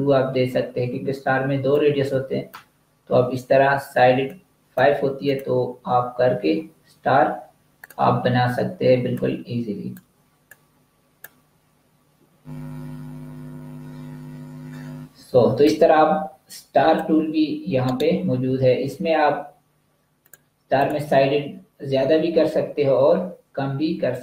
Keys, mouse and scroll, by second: 7.6 click, 10.5 click, 15.5 click, 17.7 right click, 20.1 click.